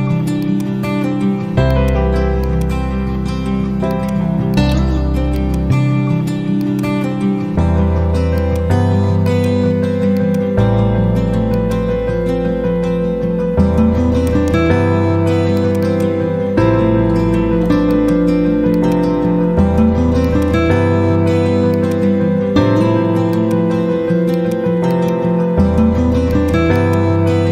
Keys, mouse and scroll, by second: 0.3 shift+click, 1.0 e, 1.7-14.5 drag, 14.2 right click, 15.4 click, 15.7 z, 15.8-17.0 drag.